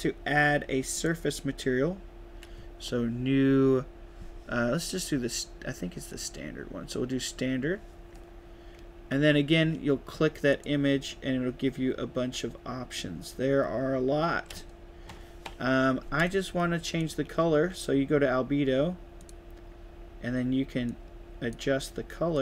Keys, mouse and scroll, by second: 0.8 click, 6.0 click, 10.4 click, 16.9 click, 19.1 click, 20.8-21.4 drag, 22.3-22.4 drag.